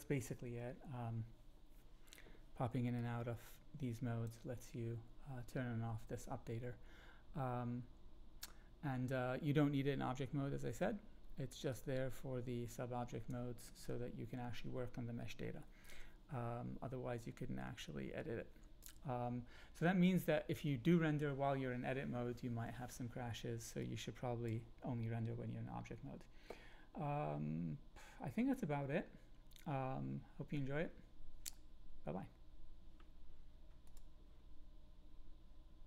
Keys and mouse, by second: 2.9-4.2 drag, 11.7-13.3 drag, 17.8-18.8 drag, 23.8-24.4 drag.